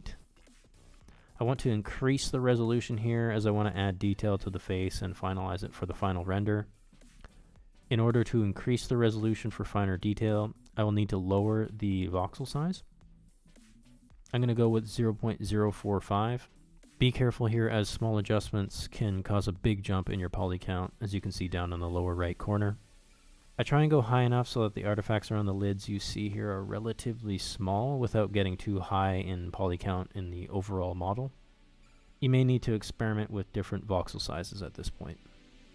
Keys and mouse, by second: 16.0 shift+middle click, 16.3 shift+middle click, 17.0 middle click, 17.4 middle click, 17.9 middle click, 18.9 shift+middle click, 19.2 shift+middle click, 19.6 shift+middle click, 20.2 shift+middle click, 20.8 shift+middle click, 21.3 shift+middle click, 21.5 middle click, 21.9 middle click, 24.1 shift+click, 24.6 shift+click, 25.1 shift+click, 26.7 shift+click, 27.9 shift+click, 29.2 shift+c, 29.6 click, 30.2 click, 30.7 click, 31.1 click, 31.5 click, 31.9 click, 32.4 click, 32.8 click, 33.8 click, 34.3 click, 34.6 click, 34.9 click, 35.2 click.